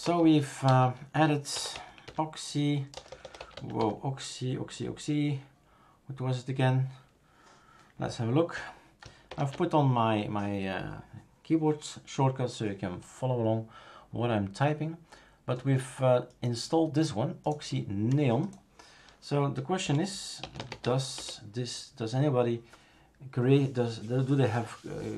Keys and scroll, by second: 0.0-4.3 typing, 9.3 shift+super+Return, 19.8-21.3 typing.